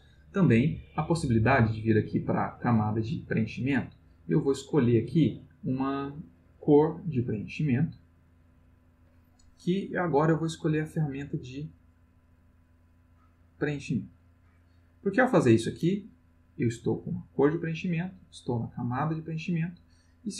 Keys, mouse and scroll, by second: 2.7 click, 4.4 click, 6.3 click, 12.8 click, 18.3 click.